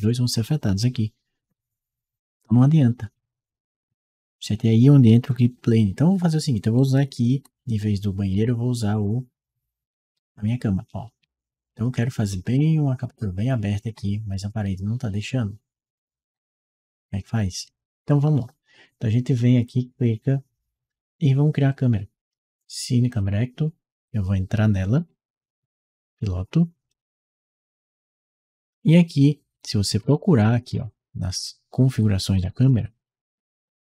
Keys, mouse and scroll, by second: 6.6 d, 7.1 w, 8.2 d, 8.8 w, 11.0 d, 12.3 a, 13.8 w, 15.0 s, 16.1 w, 19.4 click, 22.9 click, 24.7 right click, 26.7 click, 30.0-31.3 scroll up 2, 32.2 middle click, 32.4-33.9 scroll down 4.